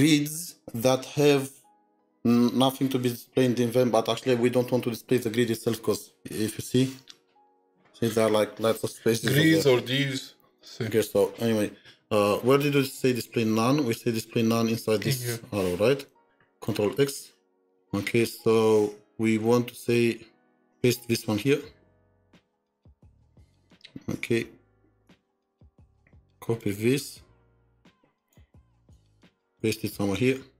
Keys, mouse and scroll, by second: 13.1 double click, 13.2-15.6 scroll down 2, 17.6-18.4 scroll up 2, 23.0 typing, 27.5 typing, 27.6 ctrl+c, 28.8 double click.